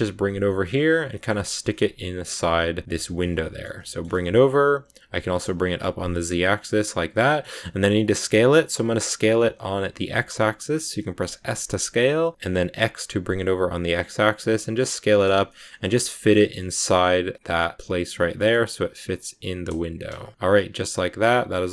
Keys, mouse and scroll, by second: 0.7 middle click, 1.2 g, 3.0 scroll down 1, 3.1 middle click, 4.0 g, 5.1 g, 7.0 middle click, 7.7 s, 15.0 middle click, 15.3 g, 16.2 g, 17.8 s, 18.2 s, 19.9 g, 20.3 middle click, 20.4 scroll up 1, 20.5 scroll down 2, 20.7-21.7 middle drag.